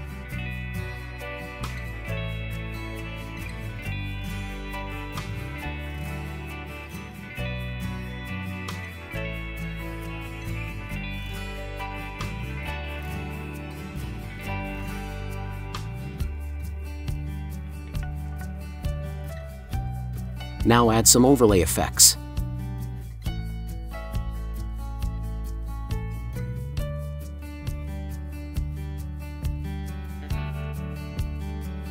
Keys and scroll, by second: 2.9 Caps_Lock, 10.2 ctrl+z.